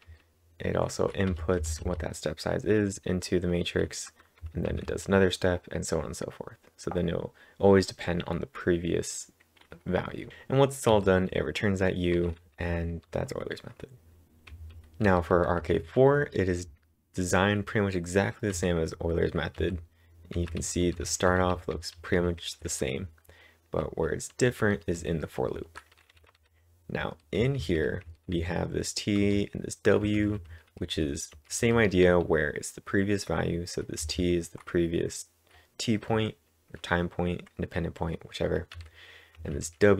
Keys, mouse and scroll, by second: 1.1-2.1 typing, 4.4 typing, 10.3-10.9 typing, 12.2-15.5 typing, 18.5-20.1 typing, 21.5-31.0 typing, 32.0 typing, 33.8-34.6 typing, 38.8-39.9 typing.